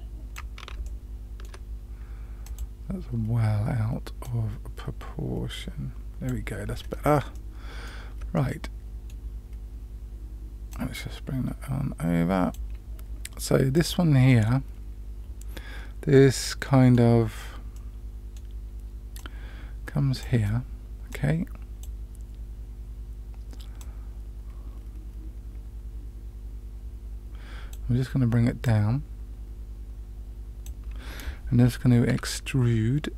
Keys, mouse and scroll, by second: 0.8 shift+middle click, 2.4 click, 4.2-6.2 drag, 6.7-7.1 scroll up 3, 7.3 shift+middle click, 8.3 middle click, 10.7-12.6 drag, 13.7 click, 14.2-16.9 middle drag, 17.7 middle click, 19.1-20.2 drag, 21.1 click, 23.7-30.6 drag, 32.1 e.